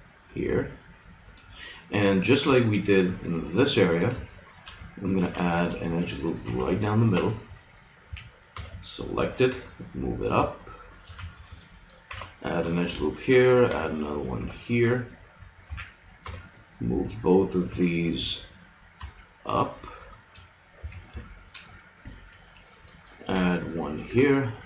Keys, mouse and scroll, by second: 1.7-4.3 middle drag, 6.4 ctrl+r, 8.1 a, 8.5 b, 9.5 g, 10.9-12.1 drag, 11.1 a, 12.1 ctrl+r, 13.7 ctrl+r, 15.7 a, 16.3 b, 17.7 g, 20.2-21.3 drag, 20.9 a, 23.3 ctrl+r.